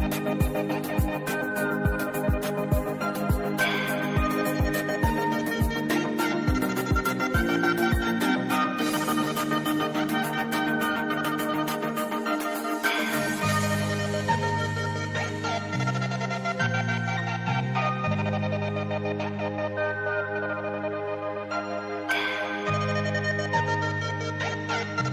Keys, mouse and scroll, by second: 0.5-1.4 typing, 1.7 click, 3.3 right click, 3.9 click, 8.0 scroll down 1, 8.1 click, 9.1 ctrl+z, 10.9 v, 12.3-17.7 shift+drag, 17.7 ctrl+z, 18.0 click, 19.0-19.5 alt+scroll up 2, 19.7 alt+scroll down 1, 20.7-24.3 alt+drag.